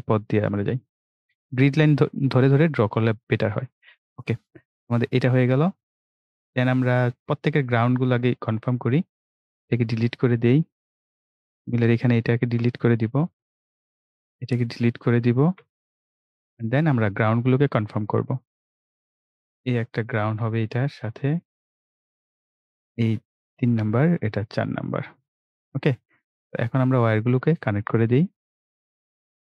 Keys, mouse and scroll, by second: 3.5 right click, 5.0 click, 8.3 click, 9.5 Delete, 10.3 scroll down 1, 11.6 click, 12.4 Delete, 13.2 scroll down 1, 14.4 click, 15.4 Delete, 17.1 scroll up 1, 19.1 click, 21.7 scroll down 1, 23.6 click, 25.4 right click, 27.2 click.